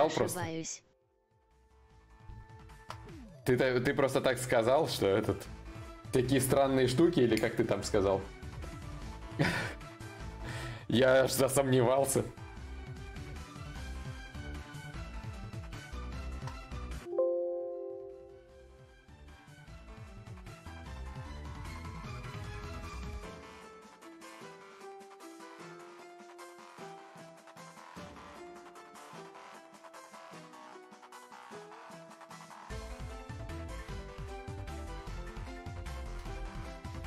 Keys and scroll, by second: 18.0 `.